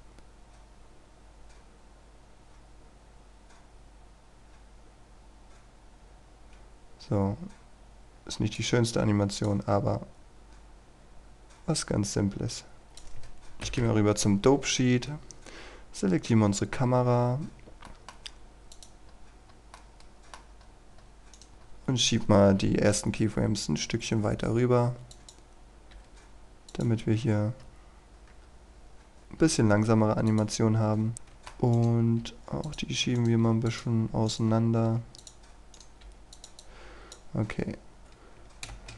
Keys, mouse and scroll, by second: 13.6 ctrl+Left, 15.6-17.9 scroll down 1, 17.9 middle click, 18.8 click, 19.1-19.8 scroll up 1, 19.8 middle click, 20.6 scroll up 1, 21.4 right click, 21.6-22.9 scroll up 1, 22.9-25.1 scroll up 1, 25.1 click, 27.1-28.0 scroll down 1, 28.0 scroll up 1, 28.1 KP_0, 29.1 click, 31.1 middle click, 31.8 right click, 32.7 click, 33.2 right click, 33.7 click, 34.3 right click, 34.5-34.9 scroll down 1, 35.2 click, 35.8 right click, 36.4 click, 38.0 scroll up 1, 38.7 shift+space.